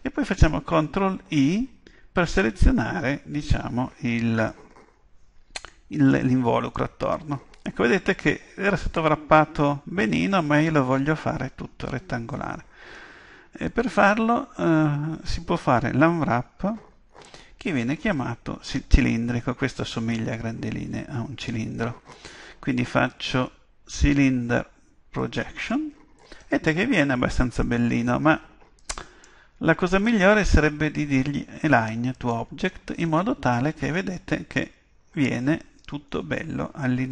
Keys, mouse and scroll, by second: 1.3 ctrl+i, 5.7-7.5 middle drag, 28.8-31.8 drag, 33.4-36.1 middle drag.